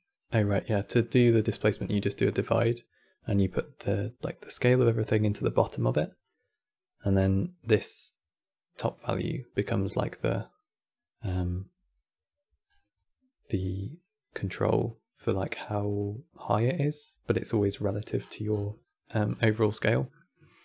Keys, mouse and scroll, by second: 0.1-0.5 scroll up 10, 0.5 middle click, 0.8-1.2 scroll up 10, 1.2 middle click, 1.5-3.3 scroll up 13, 3.3 click, 12.4 scroll down 4, 16.0-16.7 middle drag, 16.7 scroll down 4, 17.4-17.9 middle drag, 17.9-18.5 scroll down 15, 18.5-19.0 middle drag, 19.1 scroll down 5, 19.5 middle click, 20.0 scroll up 1.